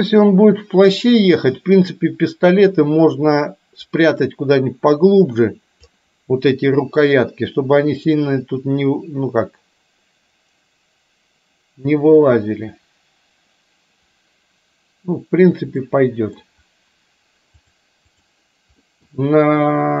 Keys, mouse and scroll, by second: 8.2-12.5 drag, 15.9 middle click, 17.8 click, 18.9 middle click.